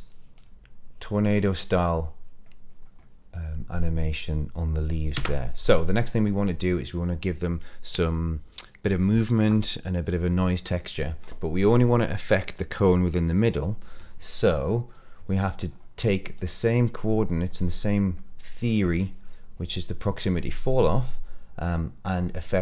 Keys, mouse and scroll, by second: 1.2 scroll down 2, 1.4-2.4 middle drag, 1.4 scroll up 1, 2.6 scroll up 1, 2.9-4.8 middle drag, 5.0 space, 6.2 click, 14.8-15.9 scroll down 7, 15.9 middle click, 18.1-18.6 drag, 20.9 middle click.